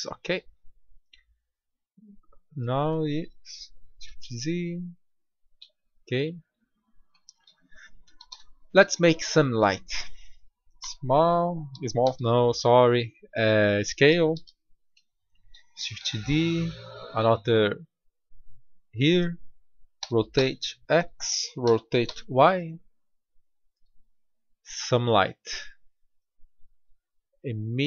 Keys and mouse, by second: 3.7 g, 6.0-6.5 middle drag, 8.2 shift+a, 10.7 s, 11.4-11.7 drag, 12.0 g, 14.3 g, 15.9 shift+d, 19.9 r, 21.6 r.